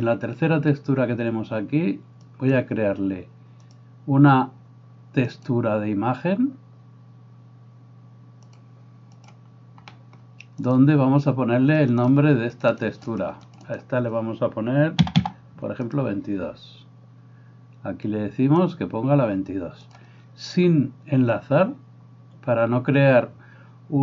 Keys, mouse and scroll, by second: 11.9-16.6 drag, 16.6-19.8 right drag, 19.8 click, 20.0-24.0 right drag.